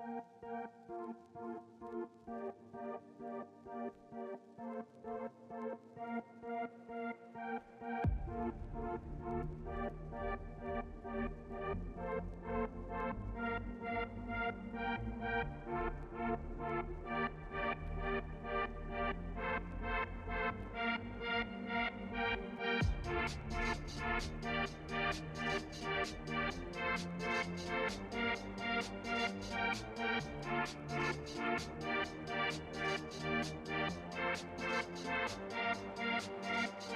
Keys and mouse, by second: 3.1 click, 3.5-3.9 shift+drag, 4.9 click, 12.7 click, 14.7 click, 15.3 click, 15.6 click, 16.0 click, 16.4 click, 16.9 click, 17.5 click, 22.5 ctrl+middle click, 24.3 click, 25.4 click, 26.1 click, 26.1 middle click, 27.5 shift+click, 29.9-30.3 middle drag, 30.8 click, 31.7 click, 32.1-32.9 drag, 33.6 click, 34.3 click, 34.6 click.